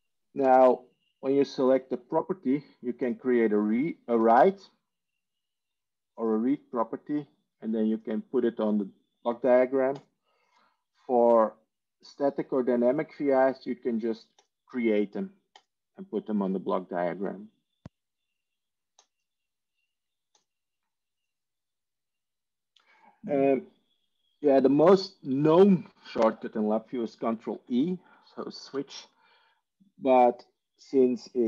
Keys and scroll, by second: 28.0 ctrl+e, 28.5 ctrl+e.